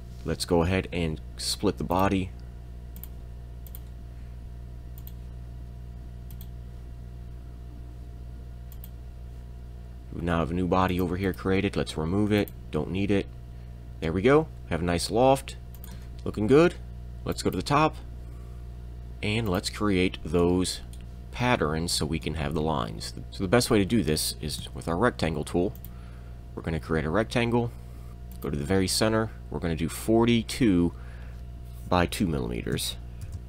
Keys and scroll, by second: 23.2 Escape, 23.2 r, 24.6 r, 32.7 2, 33.2 m, 33.3 Tab, 33.3 2, 33.3 4.